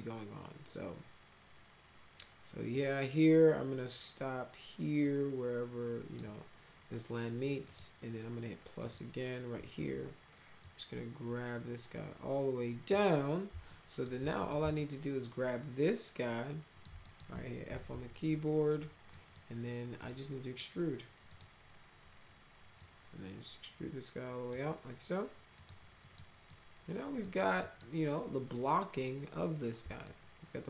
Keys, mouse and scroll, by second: 2.7-6.1 drag, 7.6 click, 8.8 click, 10.5-12.8 drag, 13.6 alt+middle click, 14.3 click, 14.7-16.8 alt+middle drag, 17.0 middle click, 17.4-18.3 typing, 19.1 middle drag, 20.0 right click, 21.2 click, 22.7-24.5 drag, 25.5 click, 26.0 middle click, 26.4 middle click, 27.2 middle click, 27.6 middle click, 30.0-30.6 alt+middle drag.